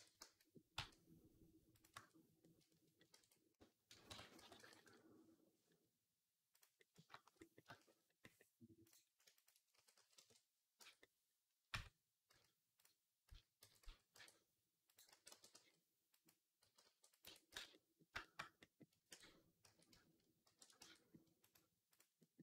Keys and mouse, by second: 0.1 a, 0.6 e, 1.8 Tab, 3.0 ctrl+s, 3.9 Tab, 4.2 s, 4.6-6.4 right drag, 6.4-8.7 drag, 8.7 middle click, 9.2 shift+click, 9.3-10.6 shift+middle drag, 9.6 s, 10.6 Tab, 11.6 Tab, 12.1 z, 13.1 z, 13.5 g, 14.9 a, 15.2 g, 16.1-19.5 middle drag, 16.5 g, 17.1 Tab, 17.4 z, 19.0 Tab, 19.5 a, 20.3 shift+n, 20.7 Tab, 21.3-22.4 right drag.